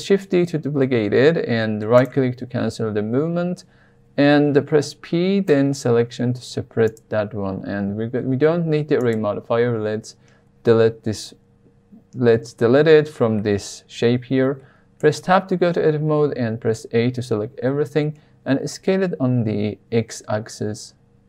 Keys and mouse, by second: 0.4 shift+d, 1.9 click, 4.7 p, 6.3 Tab, 6.8 click, 9.1 click, 14.9 Tab, 16.6 a, 18.4 s, 18.7 x.